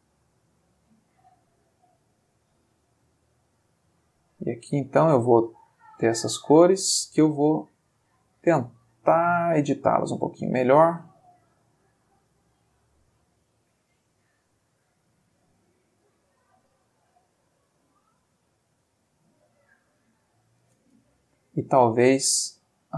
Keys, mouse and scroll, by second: 0.0-3.0 drag, 3.2 click, 5.0 click, 5.5 click, 7.5 click, 8.7-10.2 drag, 12.1 click, 12.6 click, 13.5 click, 19.0 click, 22.0 click.